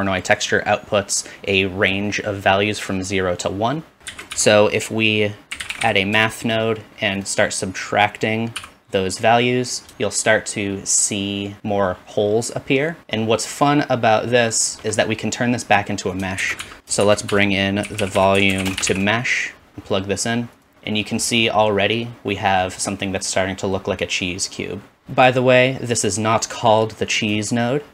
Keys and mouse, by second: 0.2-7.5 drag, 4.1 shift+a, 7.5 typing, 8.6-14.7 drag, 8.6 typing, 14.7 shift+middle click, 14.8-16.1 shift+drag, 16.4 shift+a, 17.0 shift+a, 20.7 typing, 25.0-27.3 drag.